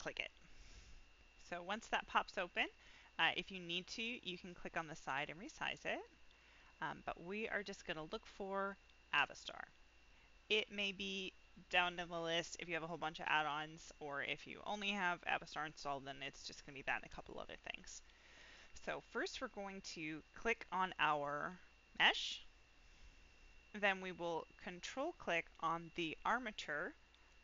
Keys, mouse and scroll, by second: 4.4-6.5 drag, 9.1 click, 17.8 middle click, 20.3 click.